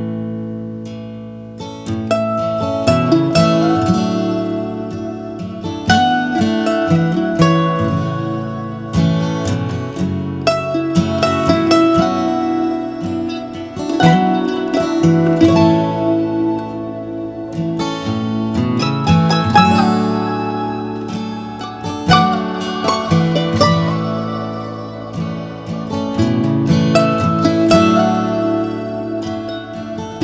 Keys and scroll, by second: 6.4 Down, 7.6 Down, 9.0 Down, 9.9 Return, 22.9-24.6 typing, 24.9 Return, 27.5-28.4 typing.